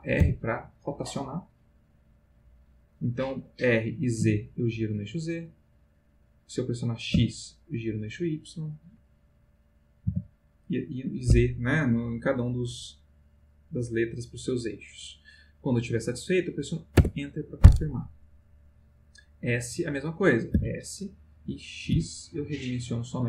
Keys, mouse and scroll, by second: 0.2 r, 4.2 z, 7.1 x, 10.0 y, 17.0 Return, 20.5 s, 21.9 x.